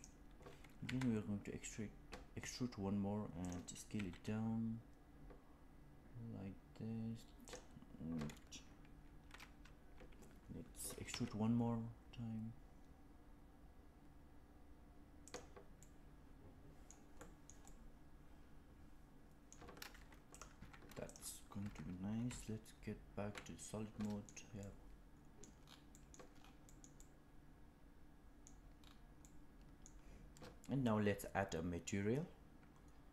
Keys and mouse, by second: 1.0 e, 3.8 s, 11.5 e, 15.7-16.8 middle drag, 17.1 middle click, 17.5-19.4 middle drag, 20.2 click, 20.5 Tab, 21.5 Tab, 22.2 z, 23.9 middle click, 24.5 middle click, 25.8 middle click, 26.6 middle click, 26.9-28.4 middle drag, 29.1 middle click.